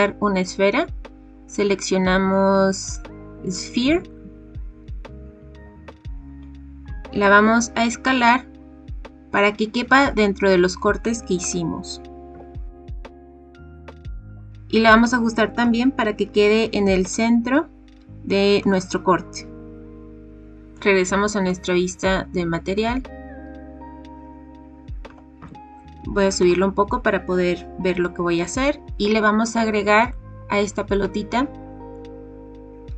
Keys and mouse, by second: 6.8 s, 11.4 click, 12.2 KP_7, 12.9 g, 13.1 x, 13.4 s, 14.1 shift+middle click, 15.6 g, 16.2 x, 18.6 click, 20.3 KP_7, 20.7 click, 21.4 drag, 21.7-22.7 middle drag, 25.0 g, 25.3 z, 26.4 click, 32.0-32.9 drag.